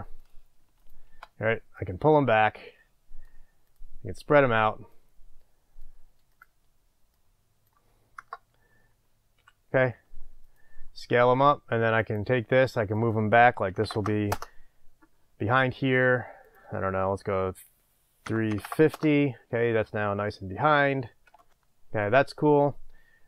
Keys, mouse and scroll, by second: 0.3 click, 0.9 shift+click, 1.8-3.7 drag, 4.9-6.4 drag, 7.2-11.2 drag, 8.2 KP_0, 9.4 s, 12.1-22.6 drag, 12.1 typing, 15.2 Return, 19.2 Return.